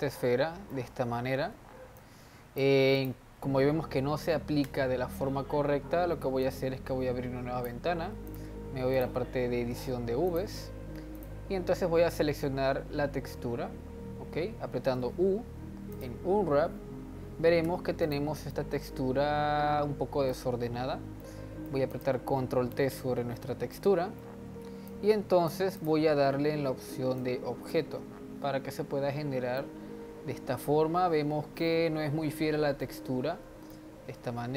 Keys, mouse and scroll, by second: 2.0-3.0 drag, 4.7 Tab, 6.4-12.6 drag, 12.6-14.9 scroll down 12, 14.9 u, 17.6 Tab, 18.0 click, 18.5-21.9 middle drag, 21.9 click, 22.4 ctrl+t, 23.7-24.8 middle drag, 24.8 click, 25.7 click, 27.2 click, 29.6-34.5 middle drag.